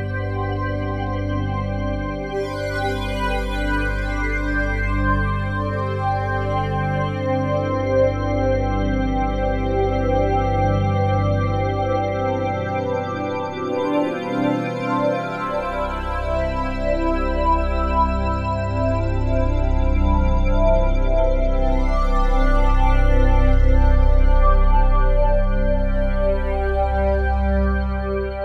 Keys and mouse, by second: 1.9 g, 3.6 Escape, 4.9-6.8 drag, 6.4 1, 6.8 g, 9.1 Escape, 10.4 click, 11.5 g, 13.9 Escape, 15.2 click, 16.2 click, 17.6 click, 18.0 click, 18.5 click, 18.8 click, 22.8-24.3 alt+drag, 24.9 alt+click, 26.8 click.